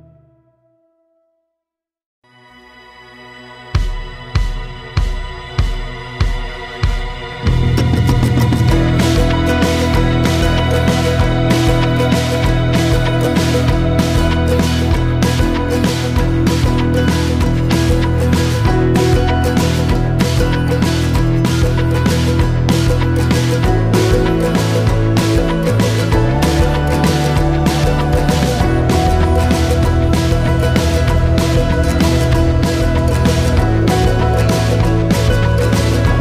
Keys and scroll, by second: 6.5 ↓, 6.7 Insert, 7.0 Insert, 7.1 Insert, 8.6 Num_Lock, 10.0-10.6 typing, 11.6 Return, 18.2-18.6 typing, 18.9 Return, 24.6 typing, 25.5 Return, 27.7-28.1 typing, 28.9 Return.